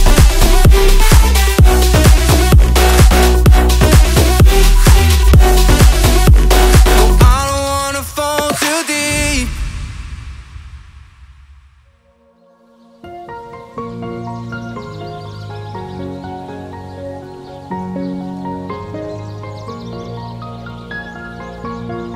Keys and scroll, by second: 0.1 space, 2.9 space, 4.6 space, 7.6 r, 17.8 alt+Tab, 21.0 ctrl+c, 21.4 Tab.